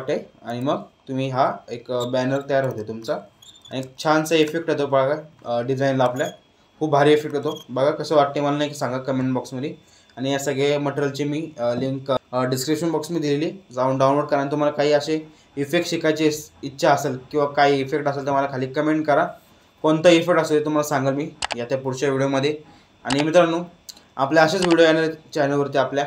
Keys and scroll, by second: 3.7 space.